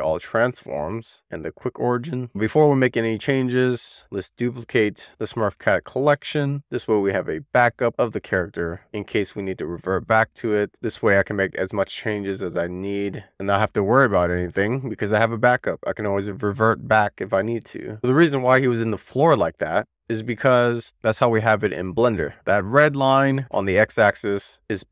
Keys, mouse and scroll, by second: 2.6 click, 3.0-4.8 right drag, 4.8 click, 5.1-6.3 drag, 7.3-17.5 drag.